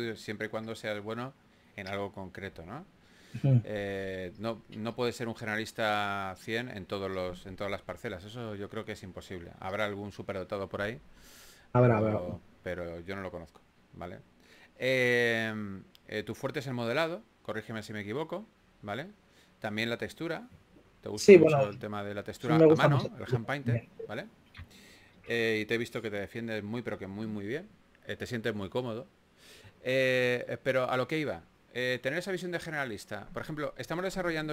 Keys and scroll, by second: 1.7 s, 6.0-6.8 typing, 10.2-11.6 typing, 13.8 3, 16.5-18.3 typing, 24.8-25.6 typing, 28.2 s, 29.4 2, 30.2 s, 32.2-34.5 typing.